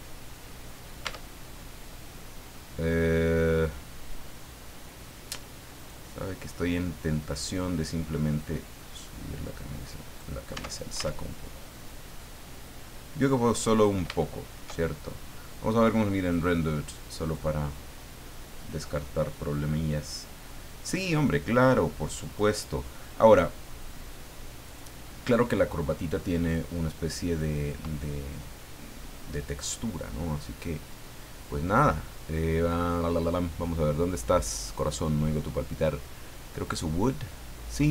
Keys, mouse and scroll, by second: 0.0 scroll down 2, 0.4 middle click, 1.1 Tab, 1.3-1.6 scroll down 2, 1.7-3.7 middle drag, 5.8 right click, 8.4-10.4 drag, 10.5 Tab, 11.6-13.7 middle drag, 14.2 shift+middle click, 15.1 middle click, 16.2 click, 17.2 click, 22.3 click, 23.8 click, 24.6 right click, 26.4 click, 27.3 click, 30.5 click, 36.6 click.